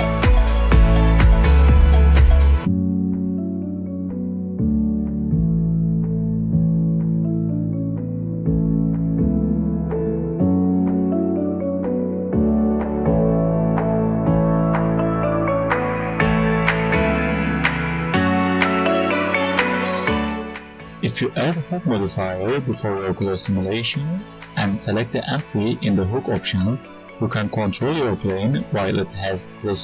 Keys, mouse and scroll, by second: 13.8 ctrl+z, 13.9 ctrl+z, 14.0 right click, 14.5 Tab, 14.7 alt+click, 15.7 click, 15.9 click, 16.2 click, 16.5 click, 16.7 click, 17.3 click, 17.5 click, 17.7-18.6 scroll down 24, 18.1 click, 18.7 click, 18.9-19.7 scroll up 11, 19.3 click, 19.7 click, 20.8 Tab, 20.9 right click, 21.4 right click, 22.0 shift+a, 22.7 Tab, 22.9 shift+s, 23.2 Tab, 23.9 shift+a, 24.5 right click, 24.9 s, 25.2 click, 25.5 click, 25.7 click, 26.2 click, 26.5 click, 27.0 click, 27.2 right click, 27.6 scroll down 1, 27.9 alt+right click, 28.2 click, 29.1-29.8 typing.